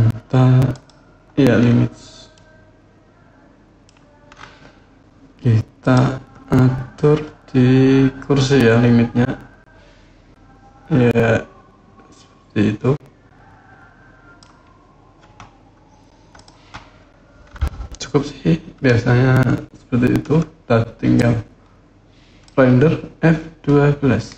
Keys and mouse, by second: 0.5 click, 2.2-3.6 middle drag, 5.6 click, 6.8-14.2 drag, 16.2 click, 18.7-20.1 middle drag, 20.9-22.3 drag, 24.2 F12.